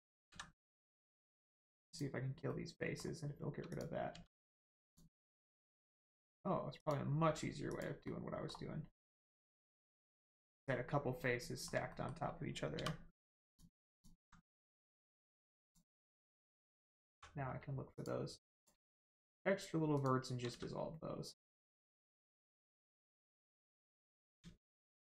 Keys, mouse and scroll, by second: 1.8 click, 2.4 middle click, 3.6 click, 4.1 x, 4.8 click, 5.3 middle click, 6.8 click, 8.0 middle click, 9.0 click, 9.3 x, 9.7 click, 10.3 middle click, 11.8 shift+middle click, 12.7 middle click, 13.4 click, 13.9 alt+click, 14.4 middle click, 15.6 click, 16.7 middle click, 17.1 1, 17.9 click, 19.1 shift+click, 19.9 shift+click, 20.5 x, 22.1 click, 22.6 middle click, 23.9 click, 24.6 shift+click.